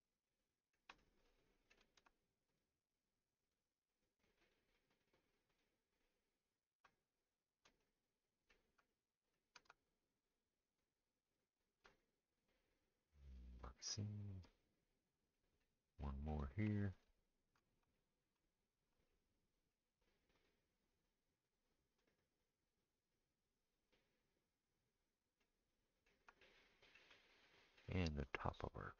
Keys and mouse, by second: 2.5 shift+click, 3.4 shift+click, 4.4 shift+click, 10.3 shift+click, 10.3 shift+middle click, 10.7 shift+click, 10.7 shift+middle click, 16.9 shift+click, 20.3 shift+click, 28.0-28.9 middle drag.